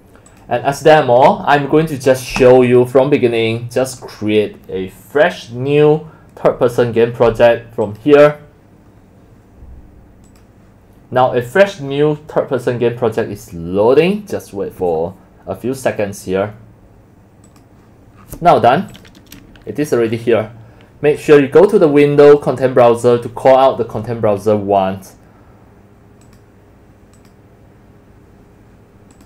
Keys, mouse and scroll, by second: 0.3 click, 2.4 click, 3.9 click, 7.8 click, 9.5 click, 10.3 click, 17.5 click, 29.1 click.